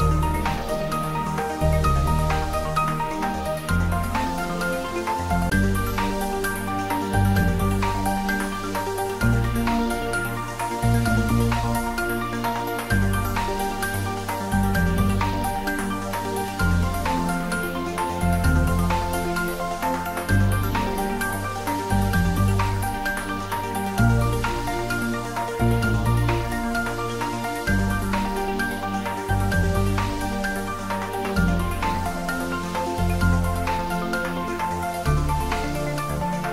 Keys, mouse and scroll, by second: 0.3 click, 1.8 g, 3.8 click, 4.5-5.9 typing, 5.8 click, 7.4 s, 9.7 click, 10.1 g, 12.7 click, 13.6 s, 15.5 click, 16.1 g, 17.9 click, 18.4 s, 18.7 x, 19.6 click, 20.6 g, 21.0 x, 21.7 click, 22.1-23.1 middle drag, 24.2 click, 27.5-28.2 scroll up 1, 28.2 g, 32.1 click, 33.1 g, 33.5 Down, 34.1 Right.